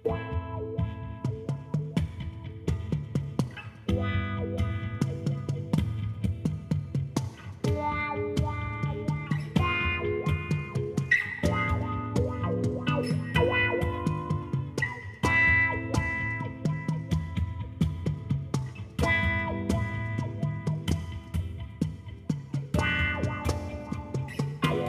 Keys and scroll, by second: 2.2 Tab, 9.0-11.3 typing, 11.6 Return, 24.4 4.